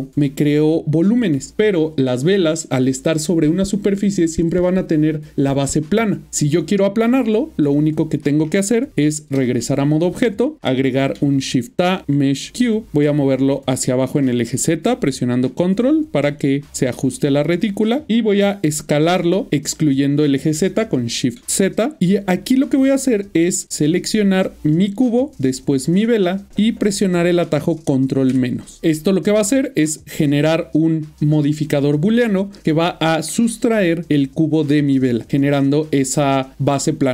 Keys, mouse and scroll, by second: 7.4 middle click, 8.9 Tab, 10.3 middle click, 11.2 typing, 12.4 click, 12.9-14.5 typing, 15.9 ctrl+click, 16.5 middle click, 21.8 typing, 22.0 middle click, 23.1 ctrl+middle click, 23.9 shift+click, 28.8 middle click, 32.2 middle click, 32.7 ctrl+middle click.